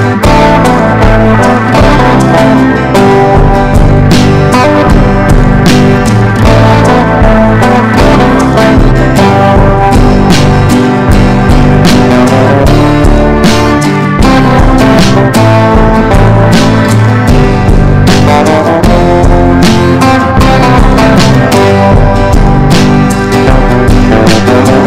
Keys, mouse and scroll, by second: 3.1 Up, 3.2 Up, 3.9 click, 6.2 ctrl+g, 7.1 click, 10.0 click, 13.1 ctrl+shift+g, 13.7 click, 14.4 right click, 15.1 click, 18.7 ctrl+z, 19.0 click, 20.9 ctrl+d, 21.1-22.7 drag, 23.8 ctrl+d, 24.2 ctrl+d, 24.6 ctrl+d.